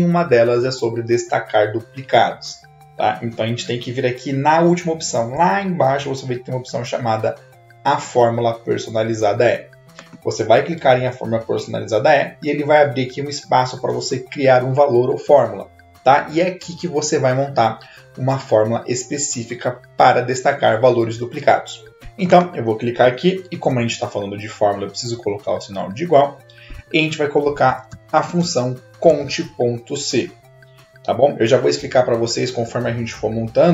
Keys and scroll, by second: 23.8 =, 27.6-29.8 typing.